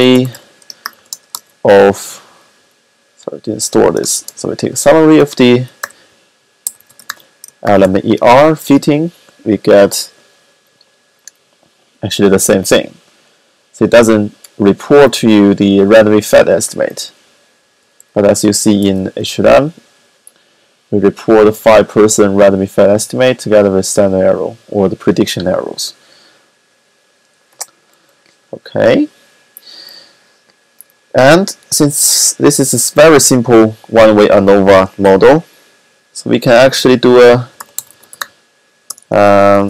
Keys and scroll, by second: 0.0-1.4 typing, 2.2 Up, 2.4 Up, 2.7 typing, 3.9 typing, 4.6 ctrl+a, 5.2-7.9 typing, 17.6 Up, 18.0 Up, 37.0-39.6 typing.